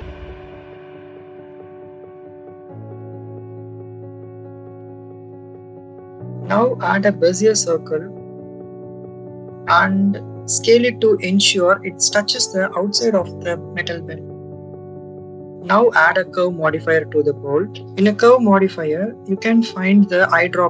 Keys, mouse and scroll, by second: 1.6 click, 1.9 click, 2.0 click, 2.4 s, 4.1 click, 4.6 shift+middle click, 5.1 middle click, 5.7 scroll up 1, 5.9 shift+a, 9.3 click, 11.4 click, 12.2-13.4 drag, 16.0-17.4 drag, 18.2 click.